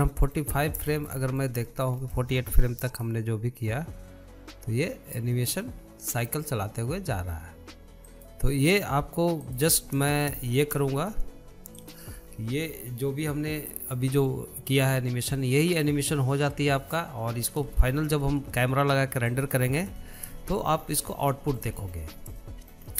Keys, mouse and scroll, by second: 0.9-2.0 drag, 2.0 shift+middle click, 2.6 scroll down 1, 2.9-4.8 shift+middle drag, 4.8 click, 10.2-11.7 drag, 11.7-12.0 scroll down 2, 12.0-13.7 shift+middle drag, 13.7-16.9 drag, 19.7 space, 21.3-21.7 drag, 21.7 scroll down 1, 22.0-22.8 shift+middle drag, 22.8-22.9 scroll up 5.